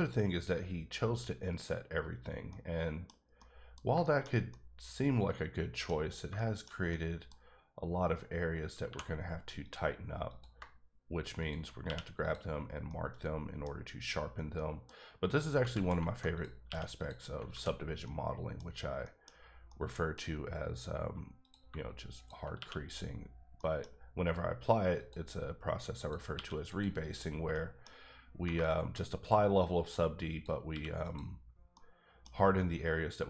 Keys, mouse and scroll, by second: 2.2 scroll down 2, 2.5 middle click, 3.2 scroll down 1, 3.4 middle click, 6.4 shift+middle click, 8.8 2, 10.3 click, 11.4 shift+click, 11.8 q, 12.2 click, 12.8 middle click, 14.5 middle click, 14.9-15.6 scroll up 1, 15.6 alt+scroll up 1, 15.7 alt+z, 16.3 click, 16.6 q, 17.0 click, 17.5 alt+z, 17.8 scroll down 2, 18.0 middle click, 18.6-19.0 scroll up 2, 19.0 middle click, 19.3 scroll down 1, 19.7 middle click, 20.2-20.8 scroll up 2, 20.8-21.4 scroll down 1, 21.6 shift+click, 22.4 shift+click, 22.5 q, 22.8 click, 23.2 scroll down 2, 23.5 middle click, 23.8 scroll up 1, 24.9 click, 26.0 click, 26.3 q, 27.0 scroll down 3, 27.5 middle click, 27.9 scroll up 2, 28.6 shift+middle click, 29.0 scroll up 1, 29.8 click, 30.3 click, 30.7 q, 31.0 click, 31.4 scroll down 2, 31.7 middle click, 32.3 scroll up 1.